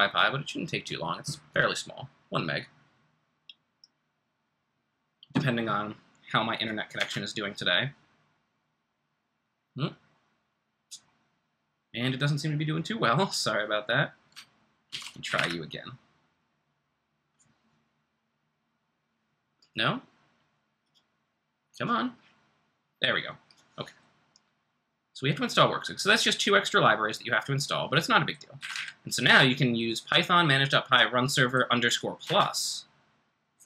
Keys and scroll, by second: 7.0 Return, 14.9 ctrl+c, 15.2 Up, 15.3 Return, 28.6 Up, 28.7 Up, 32.2 Return.